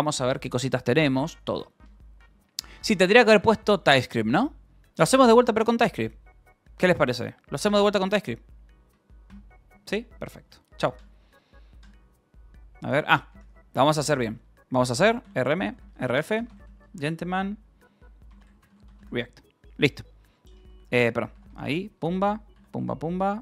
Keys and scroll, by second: 2.3 Return, 2.6 j, 4.7 :, 8.8 d, 9.8 q, 10.0 Return, 10.8 y, 12.8 space, 12.9 u, 13.3 :, 14.0 Return, 14.9-19.4 typing, 20.5-21.3 typing, 21.6 Return, 22.9 ctrl+r, 23.0 Down, 23.3 Up.